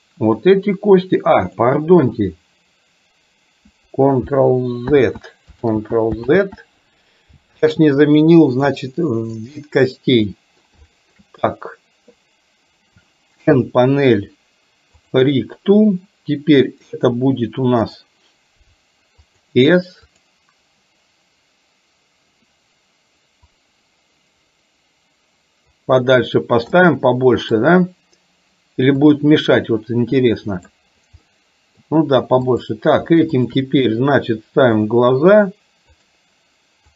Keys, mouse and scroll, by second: 5.0 ctrl+z, 5.8 ctrl+z, 6.3 ctrl+z, 8.8 click, 10.3 middle click, 11.0 shift+middle drag, 13.5 n, 18.1-19.6 drag, 20.1 click, 23.7-25.7 drag, 26.8-28.0 middle drag, 29.1-30.7 drag, 31.3 middle click, 32.6 click, 33.5 shift+click, 35.0-36.2 drag.